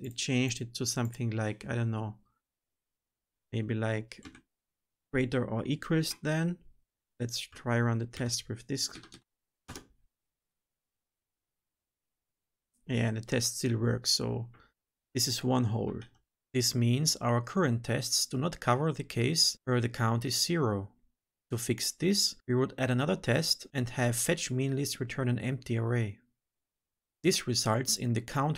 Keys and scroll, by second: 2.7 Delete, 8.1 alt+shift+F10, 15.9 ctrl+z.